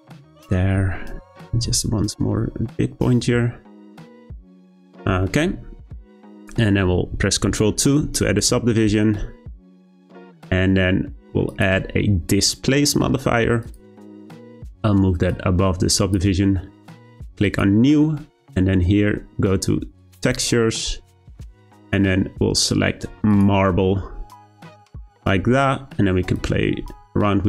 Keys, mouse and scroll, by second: 1.3 g, 4.4 Tab, 4.7-5.2 scroll down 2, 5.2 shift+middle click, 5.6-7.8 scroll up 3, 7.8 ctrl+2, 13.7 click, 15.3-16.1 drag, 17.4-24.8 drag, 26.3-27.4 drag.